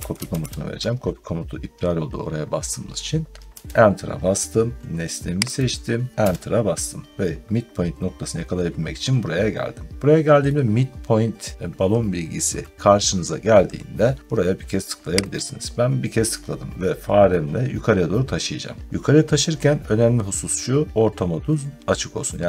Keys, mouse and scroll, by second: 0.0-0.8 typing, 3.3 Return, 5.4 click, 6.1 Return, 7.1 middle click, 7.2 middle click, 15.2 click.